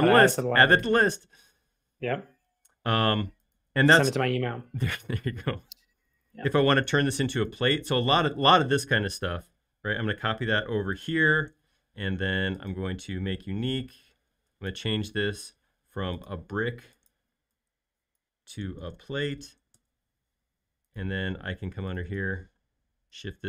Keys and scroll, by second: 8.6 m, 11.4 space, 18.6-19.9 typing, 22.4 p.